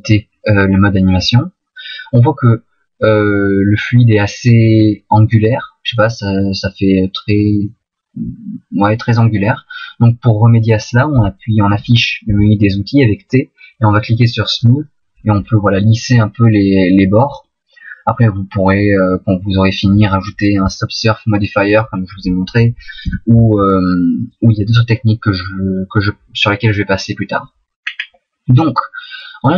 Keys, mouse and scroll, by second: 4.6-5.9 scroll up 3, 5.9 middle click, 9.3 middle click, 12.3 t, 16.0 click, 18.1 middle click, 23.0 t, 27.8-28.4 scroll down 2, 28.4 middle click.